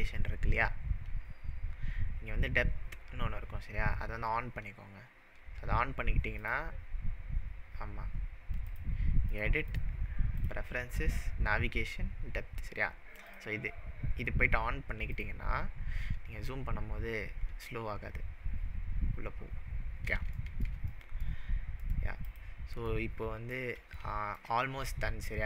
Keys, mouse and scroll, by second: 1.2 click, 6.3 click, 8.7-9.4 drag, 9.7-12.7 drag, 13.3 click, 15.7-18.0 scroll up 18, 18.1-18.5 scroll up 5, 18.6-20.2 scroll down 23, 20.4-21.4 shift+middle drag, 22.3 click, 22.9-23.7 middle drag.